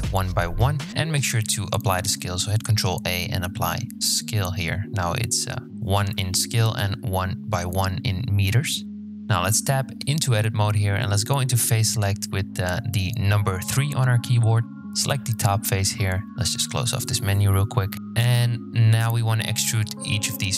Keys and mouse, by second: 0.9 ctrl+a, 8.8 Tab, 12.2 3, 16.2 n, 16.8 shift+click, 17.7 click, 19.2 e.